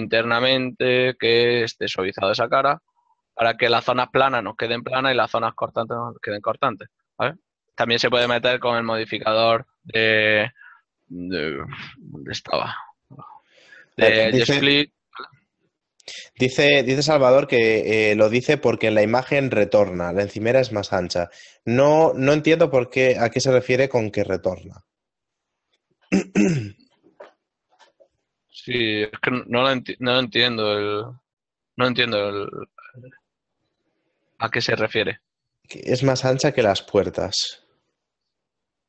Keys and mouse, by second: 2.8 click, 4.0 ctrl+middle click, 4.1 middle click, 8.8 ctrl+middle click, 10.8 shift+middle click, 16.6 middle click, 20.0 middle click, 21.6 middle click, 23.3 middle click, 24.9 middle click, 34.9 middle click, 36.0 shift+middle click, 37.2 ctrl+middle click.